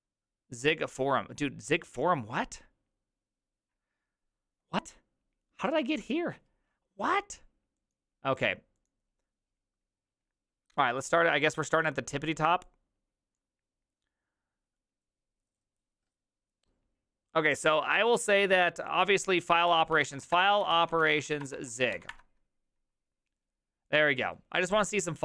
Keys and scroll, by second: 19.7 ctrl+t, 19.7-22.5 typing.